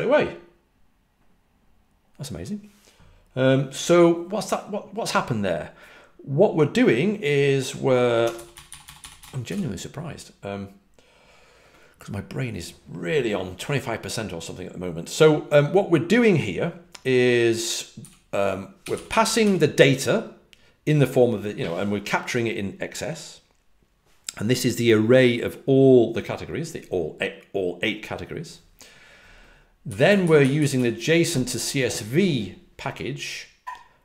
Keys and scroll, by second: 7.9-9.9 typing, 17.9-19.8 typing, 29.8-30.7 typing.